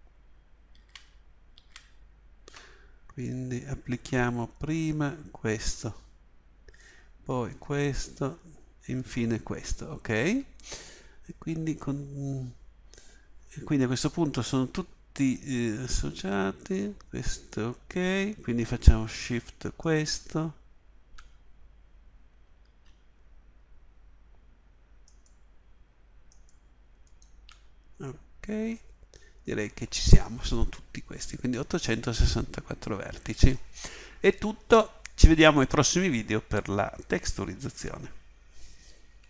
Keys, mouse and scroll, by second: 0.8 ctrl+z, 1.5 ctrl+z.